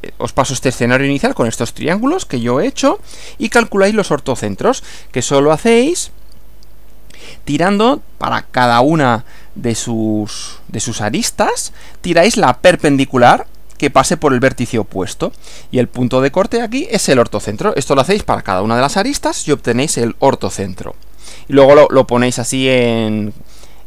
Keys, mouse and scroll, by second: 3.0 Left.